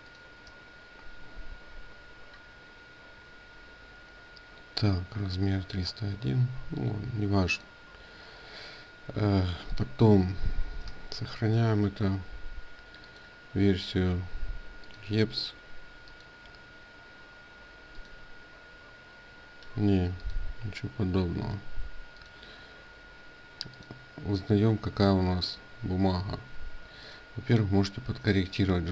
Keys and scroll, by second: 11.2 ctrl+shift+s.